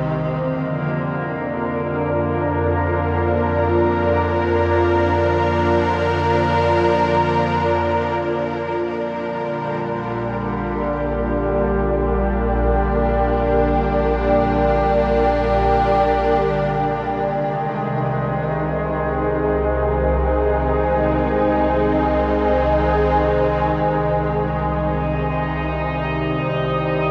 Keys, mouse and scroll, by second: 1.1 scroll down 1, 1.5 z, 1.7 click, 2.0 z, 6.8 shift+Right, 7.5-9.4 typing, 7.8 click, 8.2 click, 8.2 click, 8.6 click, 9.5 click, 13.8 shift+Left, 14.7-15.4 typing, 15.1 click, 15.5 click, 18.3 right click, 18.9 click, 21.1-21.7 scroll down 1, 21.7 z, 21.9 click, 22.1 space, 22.3 click, 22.3 z, 22.6 click, 22.7 space, 22.8-27.1 drag.